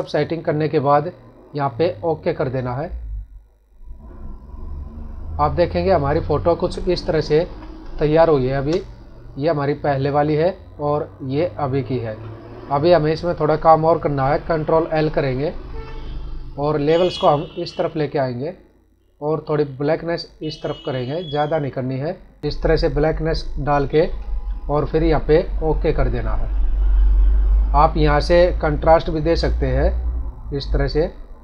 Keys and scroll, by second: 7.2 ctrl+=, 7.8 space, 15.5 ctrl+l.